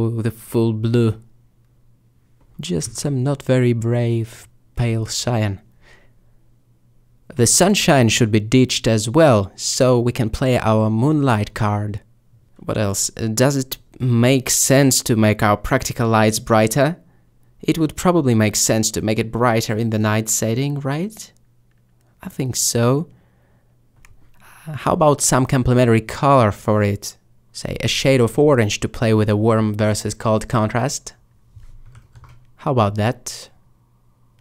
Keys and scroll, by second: 4.9 3, 16.7 5, 21.0 a, 24.4 g.